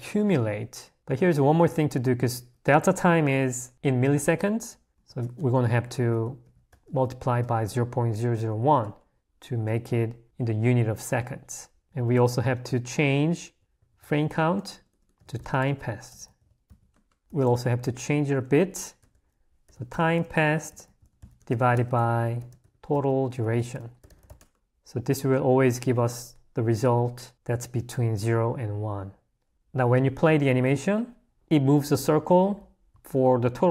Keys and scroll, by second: 0.9 l, 2.3 a, 12.6 h, 14.2 i, 16.9-17.7 typing, 25.0 h, 29.5 Escape.